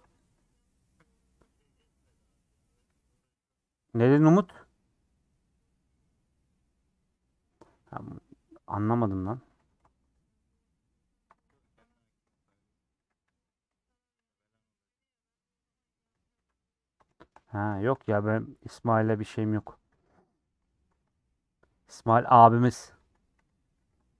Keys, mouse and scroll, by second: 0.0 u, 0.7-1.9 middle drag, 1.9-3.0 scroll down 1, 3.0-3.8 scroll down 1, 3.8-8.0 middle drag, 8.0 scroll up 3, 8.2-10.2 middle drag, 9.6 3, 10.2 alt+click, 10.9 alt+click, 11.8 ;, 12.9 a, 13.8 scroll up 1, 14.6 click, 15.0 click, 15.7 scroll down 1, 15.8 middle click, 16.2 a, 16.6 u, 17.1 shift+middle click, 17.9 scroll up 2, 18.3-19.4 middle drag, 19.4 click, 20.0 a, 21.8 middle click, 22.0 /, 22.5 Tab, 22.7 h, 23.1 click, 23.7 /, 24.0 middle click.